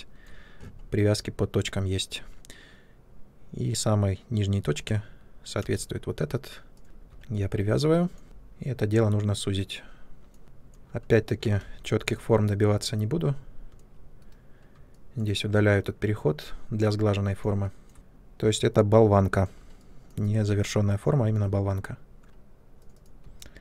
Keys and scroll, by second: 5.5 space, 8.2 r, 10.4 space, 11.5 2, 14.2 Delete.